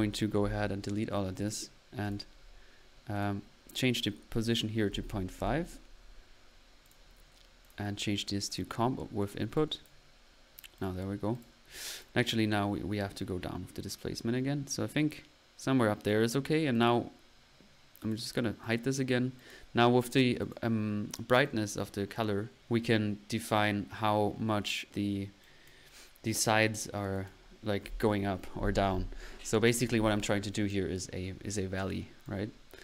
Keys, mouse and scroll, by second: 0.6 Delete, 1.0 middle click, 1.4 click, 1.7 middle click, 2.0 click, 3.1 click, 3.7 click, 6.8 click, 9.3 middle click, 9.5 click, 10.9 click, 16.1 click, 16.7 click, 18.1-18.5 drag, 18.8-19.1 drag, 19.7-20.0 drag, 20.4-20.7 drag, 20.4-20.7 typing, 20.9-21.3 drag, 21.4-25.3 drag, 25.7 drag, 27.3 click, 30.3 click, 32.2-32.8 drag.